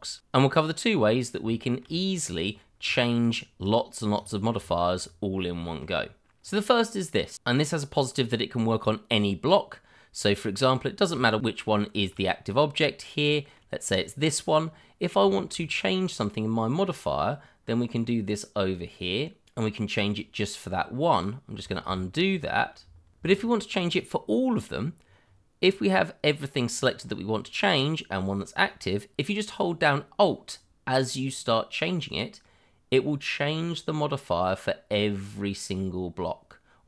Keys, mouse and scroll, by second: 1.2 scroll up 1, 1.6 shift+middle click, 2.4 click, 2.9 double click, 4.1 click, 4.7 shift+middle click, 5.6 middle click, 5.7 shift+middle click, 6.4 click, 11.4 click, 12.4-13.1 scroll up 1, 13.1 middle click, 14.5-15.0 scroll up 1, 15.3 shift+middle click, 15.3 middle click, 15.5 shift+middle click, 15.7-16.2 scroll up 1, 19.4 click, 21.8 ctrl+z, 23.1 ctrl+z, 23.3 shift+click, 24.2 scroll down 1, 24.7-25.1 scroll up 1, 25.2-25.7 scroll down 1, 26.9-27.4 scroll up 1, 31.2 click.